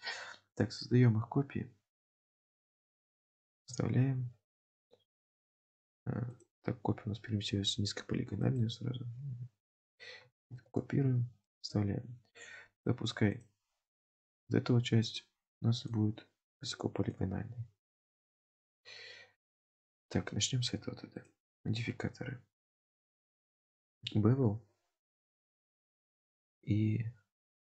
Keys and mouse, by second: 3.6 ctrl+v, 6.3 click, 8.6 click, 9.8 click, 11.0 ctrl+v, 13.3 click, 15.1 click, 15.9-16.6 drag, 17.2-18.2 drag, 19.6 click, 21.3-23.8 drag.